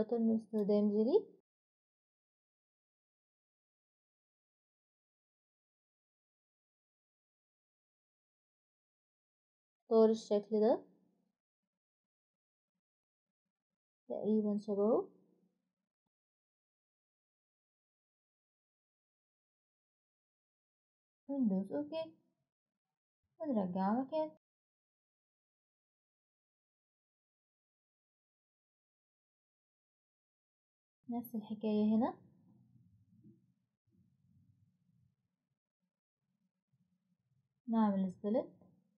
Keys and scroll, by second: 24.4-27.0 typing, 31.0 Escape.